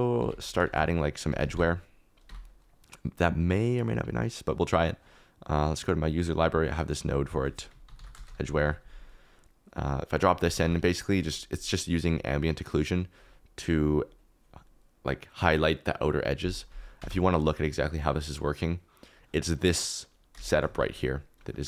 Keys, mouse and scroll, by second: 0.2 ctrl+s, 0.6 shift+a, 2.2 click, 5.4 click, 7.3 click, 8.2 click, 10.6 g, 13.7-15.4 middle drag, 16.9 Tab, 18.4 click, 19.1 click, 20.4 shift+click, 20.7 g.